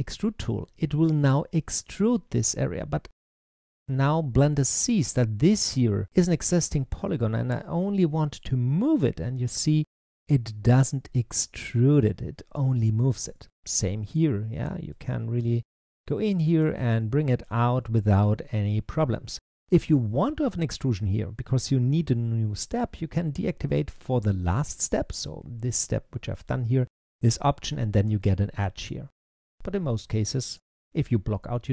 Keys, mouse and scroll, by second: 3.4 click, 4.3 click, 7.0 click, 13.2 middle click, 13.9 click, 14.7 click, 16.8-19.9 middle drag, 27.2 click, 30.4 click.